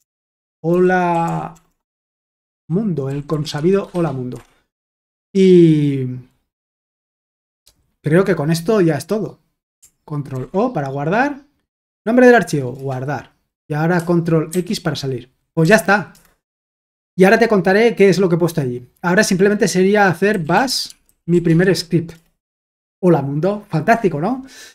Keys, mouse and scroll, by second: 0.0-0.7 typing, 2.2-4.8 typing, 10.3 ctrl+o, 12.7 Return, 14.5 ctrl+x, 15.6-16.1 typing, 16.1 Return, 20.0-22.8 typing.